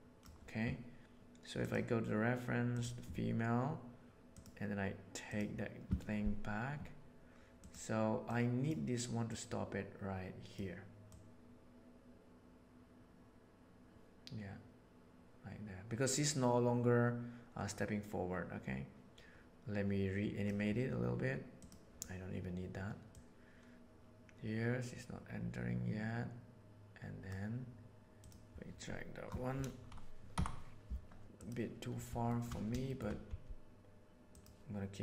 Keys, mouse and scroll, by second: 4.3 click, 7.6 middle click, 8.3-8.6 middle drag, 9.3-10.5 middle drag, 11.1-11.6 middle drag, 14.9-20.4 drag, 21.5 click, 23.0-23.6 drag, 26.8 click, 30.3 Up, 31.2 g, 32.3 shift+middle drag, 32.8 shift+middle click, 33.3 g.